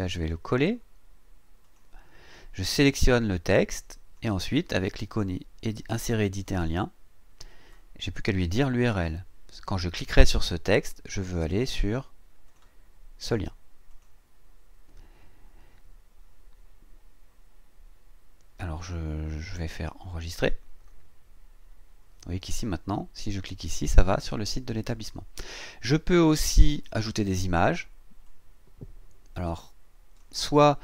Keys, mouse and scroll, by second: 0.6 right click, 1.6 click, 3.0-4.3 drag, 6.4 click, 11.2 right click, 12.5 click, 13.9 click, 20.3 click, 28.2-30.4 drag.